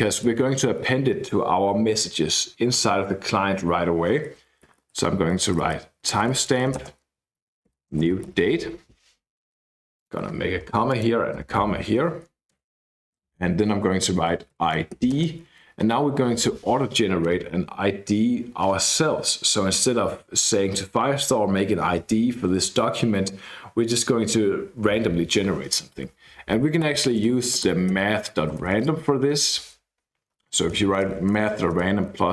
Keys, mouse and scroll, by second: 0.0-0.8 typing, 4.3-9.2 typing, 10.0 click, 10.6 ,, 10.8 click, 11.3 ,, 12.5 KP_Enter, 14.2-15.4 typing, 17.2 Escape, 23.9-24.5 scroll up 2, 26.6-30.6 typing, 31.7-32.3 typing.